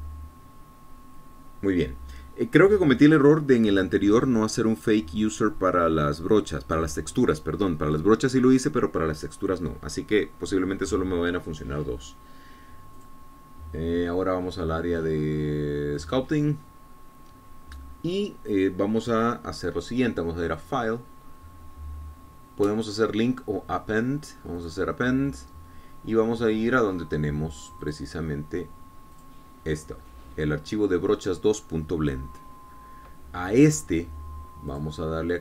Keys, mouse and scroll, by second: 0.5 click, 14.3 click, 17.4 click, 21.9 click, 25.9 click, 29.2 click, 30.5 click.